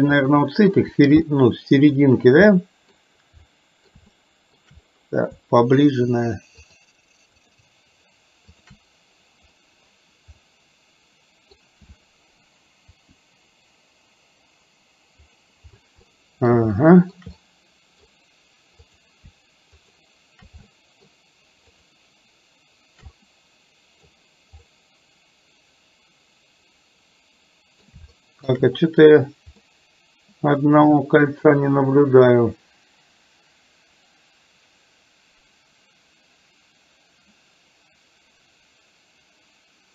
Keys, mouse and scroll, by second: 0.3-0.9 middle drag, 1.4 middle click, 2.5-3.1 middle drag, 3.5-4.0 middle drag, 4.3-4.6 shift+middle drag, 6.8 shift+click, 7.4 shift+click, 10.5-11.6 middle drag, 13.1 r, 16.1-16.5 middle drag, 16.9-17.3 shift+middle drag, 17.4-18.1 middle drag, 19.8-20.3 shift+drag, 20.8-21.3 shift+middle drag, 21.8 shift+click, 23.3-24.1 middle drag, 24.8-27.9 middle drag, 28.3-28.6 shift+middle drag, 29.8-39.9 middle drag.